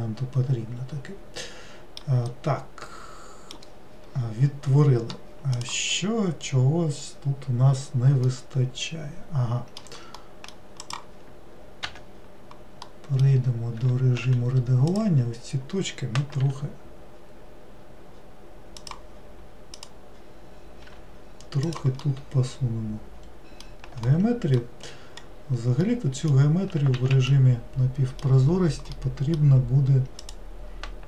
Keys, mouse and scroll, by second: 2.4-5.5 middle drag, 8.4-11.0 middle drag, 11.0 click, 13.0 middle click, 13.9 Tab, 15.0 click, 19.8 click, 22.2-25.2 middle drag, 25.2-26.0 scroll up 3, 26.0-27.1 middle drag, 27.1 alt+z, 27.4-30.3 middle drag, 30.3 click.